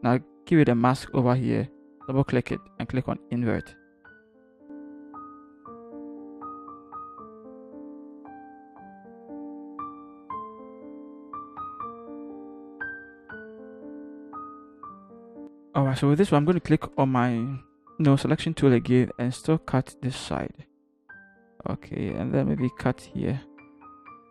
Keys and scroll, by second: 9.9 Return, 10.5 shift+Left, 10.7 shift+Left, 10.8-11.9 typing, 11.4 Left, 13.0 Left, 13.2 Left, 13.4 Left, 13.5 ctrl+t, 14.2-14.8 typing, 16.4 l.